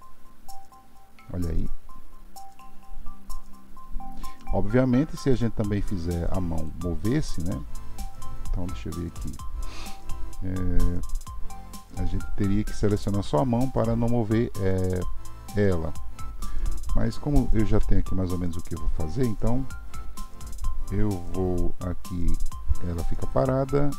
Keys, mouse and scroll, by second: 6.6 click, 17.7 KP_3, 23.3-23.9 drag.